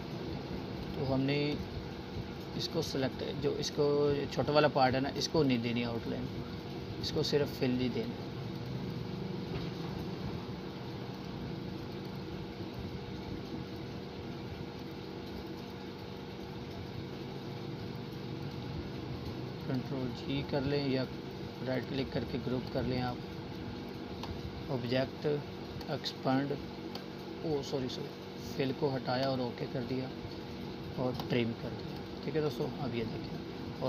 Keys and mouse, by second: 5.6 right click, 6.3-12.5 drag, 12.9 right click, 16.2 right click, 17.1 click, 31.3 Delete, 32.8 click.